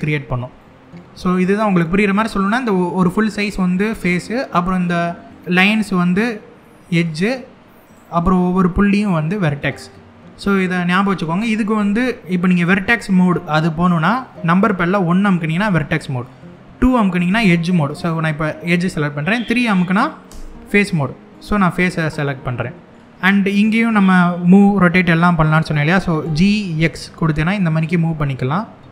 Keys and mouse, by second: 0.3 middle click, 1.0 click, 1.4 middle click, 3.0 click, 5.7 click, 6.3 middle click, 7.5 click, 8.7 click, 10.2 middle click, 15.1 1, 17.0 2, 17.6 click, 20.0 3, 21.4-22.5 middle drag, 23.4 middle click, 25.9 g, 26.4 x.